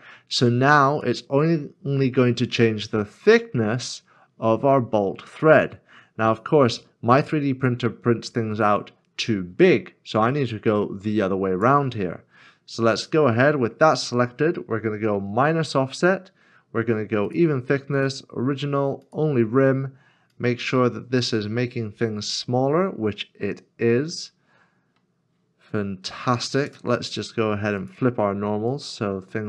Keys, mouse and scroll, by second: 12.5 scroll up 1, 13.2 middle click, 13.9-15.1 scroll up 1.